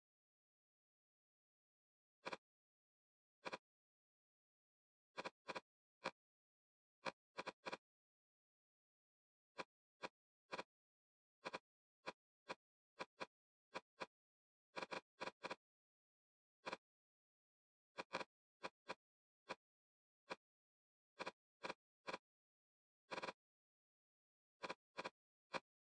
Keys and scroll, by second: 0.1 2, 0.2 Return, 3.0 Escape, 6.4 d, 7.9 l, 8.0 Return, 14.1 e, 17.3 Escape, 20.6 l.